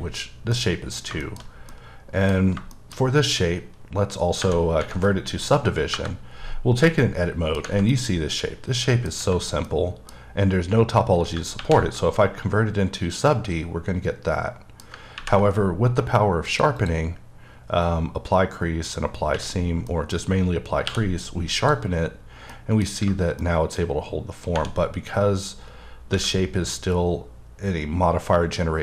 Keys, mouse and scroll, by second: 0.4 scroll down 1, 0.5 middle click, 1.5 scroll down 1, 1.7 middle click, 3.0 scroll down 1, 5.9 KP_Divide, 6.9 middle click, 7.9 middle click, 9.7 middle click, 11.6 ctrl+1, 12.2 middle click, 16.5 click, 18.8 double click, 19.9 middle click, 20.8 q, 21.6 click, 22.5 middle click, 23.4 middle click.